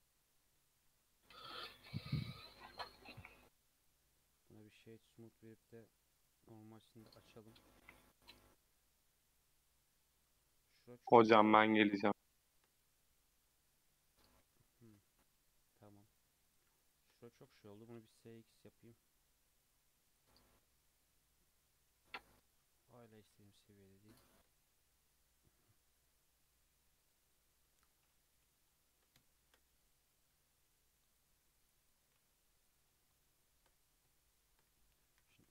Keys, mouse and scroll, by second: 0.4 Tab, 1.1 scroll up 1, 1.2 scroll down 2, 1.5-2.1 middle drag, 2.1 scroll down 2, 2.2-3.3 middle drag, 3.3-5.5 right drag, 5.5 click, 6.1-7.0 drag, 7.3-10.7 middle drag, 10.7 Tab, 10.8-11.7 scroll up 3, 11.7 click, 12.2-13.2 shift+middle drag, 13.2 scroll down 1, 13.4 middle click, 14.3 3, 14.6-16.0 middle drag, 16.0 click, 16.4 shift+click, 16.8 shift+click, 17.2-17.7 middle drag, 17.7 s, 20.3 Tab, 20.5-22.4 middle drag, 22.4 Tab, 23.1 s, 24.4 Tab, 24.7-27.8 middle drag, 27.8 scroll down 2, 28.3 KP_3, 28.6 scroll down 2, 29.2 shift+middle click, 29.5-29.8 scroll up 3, 29.8 Tab, 30.3 3, 30.7 click, 31.2 2, 31.4 click, 32.1 alt+z, 32.3 click, 33.0 scroll up 2, 33.4 shift+middle click, 33.8 scroll up 2, 34.2-35.2 shift+middle drag, 35.2 e.